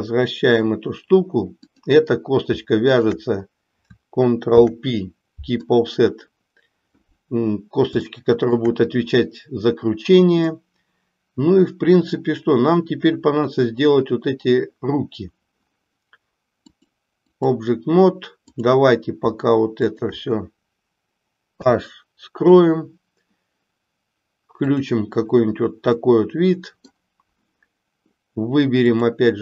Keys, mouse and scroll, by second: 1.7 click, 4.5 ctrl+p, 8.1 shift+middle click, 10.5-11.7 middle drag, 16.7 click, 19.8 shift+click, 21.5 h, 24.8 click, 25.9-26.9 middle drag.